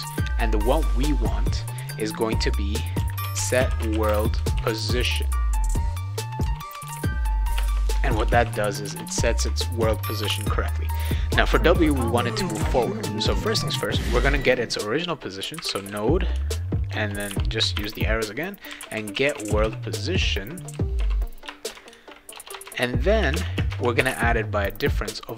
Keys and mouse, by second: 2.7-4.6 typing, 6.1-10.2 typing, 7.6 Return, 15.3-23.8 typing, 21.4 Return.